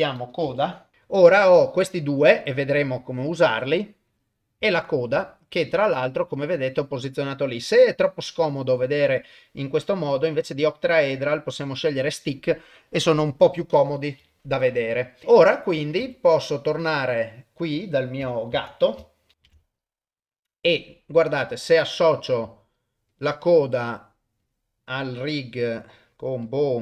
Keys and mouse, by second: 4.1 click, 4.8 ctrl+middle click, 5.2 shift+middle click, 5.8 ctrl+middle click, 6.6 click, 10.2-11.3 drag, 14.5 shift+middle click, 16.0 ctrl+Tab, 17.1 click, 18.6 ctrl+s, 19.9 middle click, 20.8 click, 23.1 click, 25.2-26.1 drag, 26.5-26.8 drag.